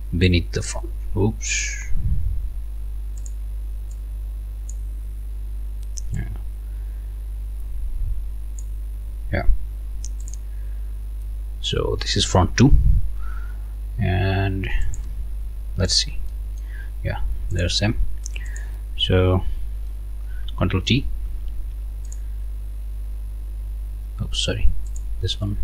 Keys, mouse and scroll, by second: 0.3-1.8 drag, 3.2 click, 3.9-5.2 drag, 6.2-8.8 drag, 10.4 click, 12.0 click, 14.9 click, 16.3 click, 17.5 click, 18.5 click, 21.3 ctrl+t, 22.1 click, 24.9 click.